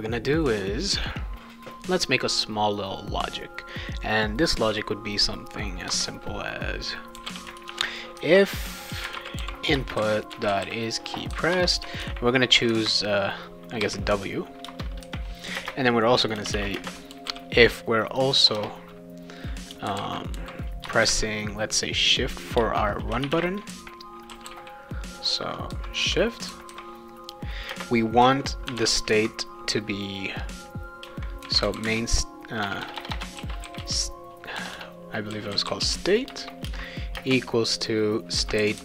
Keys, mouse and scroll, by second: 5.8 Return, 6.9-12.5 typing, 11.5 Return, 13.8 w, 14.6 Return, 15.6-21.3 typing, 22.5 Return, 23.0-24.6 typing, 26.0 Return, 27.7 space, 28.6 shift+[, 31.2-37.1 typing.